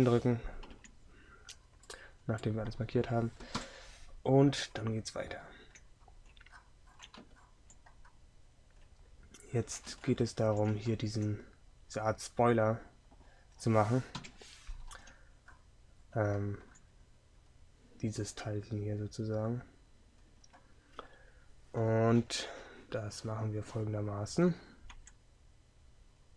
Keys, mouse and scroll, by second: 3.6 KP_3, 14.2 KP_7, 15.0 z, 25.0 Tab.